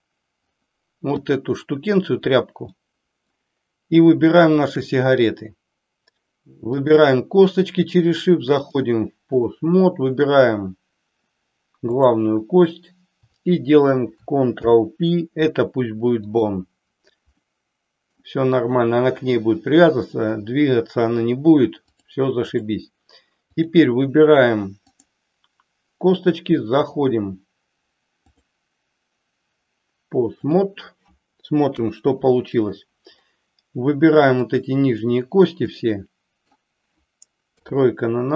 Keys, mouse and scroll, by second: 1.3 click, 2.8-3.5 middle drag, 4.5 shift+click, 6.9 shift+click, 8.5 click, 14.4 ctrl+p, 17.6 middle click, 22.0 click, 23.5 click, 24.8 click, 28.1-30.5 drag, 31.7 KP_3, 34.5 click, 35.8 middle click, 37.4 KP_3.